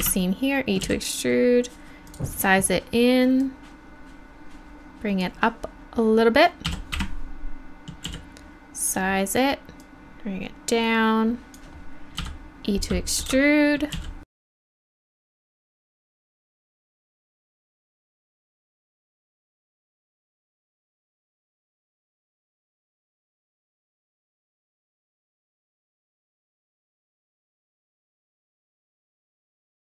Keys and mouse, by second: 0.5 click, 0.8 s, 6.7 e, 8.0 s, 8.9-11.5 drag, 12.2 e, 13.9 s, 15.1 e, 15.3 s, 16.3 f, 16.5 click, 16.7 ctrl+z, 16.9 e, 17.0 s, 17.3 click, 18.2-22.9 typing, 18.6 click, 19.9 click, 21.5 click, 22.8 click, 24.2 shift+e, 24.8 click, 25.6 right click, 26.2 right click, 26.4-29.9 typing, 27.2 middle click, 27.4 click, 27.6 click, 28.8 right click, 29.1 click, 29.8 click.